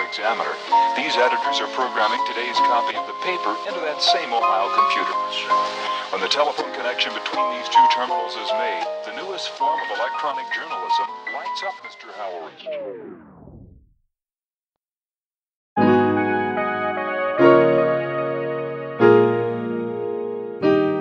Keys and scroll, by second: 5.8-7.8 typing, 11.7 super+z.